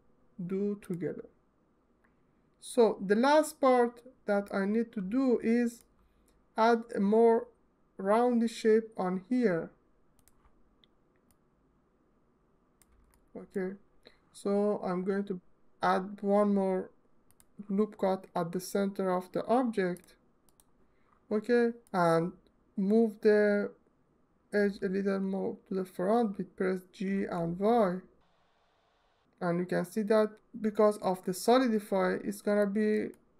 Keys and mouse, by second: 0.5 click, 4.1-5.5 alt+middle drag, 9.9 click, 11.0-12.5 drag, 17.0 click, 24.2 g, 26.8 y, 32.4 alt+click, 32.8 ctrl+alt+click, 33.2 ctrl+alt+middle click.